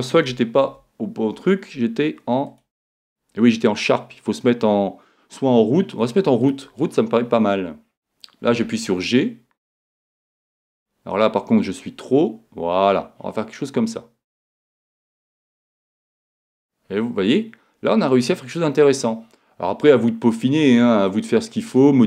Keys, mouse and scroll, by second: 0.6 super+z, 2.5-4.3 drag, 8.5 g, 14.9-16.6 drag, 15.2-17.4 middle drag, 21.8-22.0 middle drag.